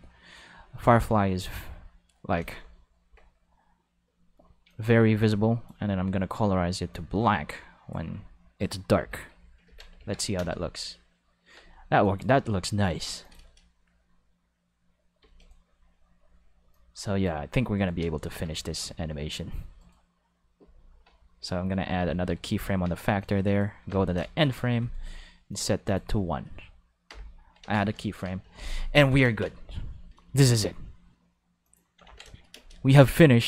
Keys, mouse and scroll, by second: 3.0 5, 4.7-5.6 drag, 7.1 click, 9.0 5, 10.0 alt+a, 10.4 space, 11.5 space, 12.0 click, 13.1 space, 13.2 click, 13.2 5, 13.4 space, 13.5 5, 15.2 space, 15.3 5, 15.4 right click, 16.7-17.2 drag, 17.7 right click, 22.0 5, 23.2 click, 25.5 click, 25.8 click, 27.1 5, 27.6 ctrl+s, 28.4 alt+a, 29.3 ctrl+space, 31.6 click, 32.0 ctrl+5, 32.5 space, 32.6 5.